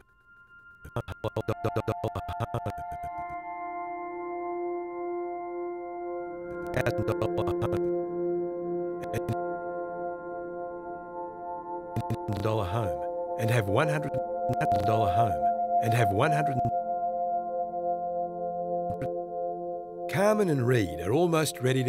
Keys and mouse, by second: 4.1 g, 5.5 click, 6.5-9.6 drag, 10.0 g, 11.1-12.5 drag, 12.3-14.2 typing, 14.4 click, 16.5 space, 18.8-19.5 drag, 19.2 space, 20.9 typing.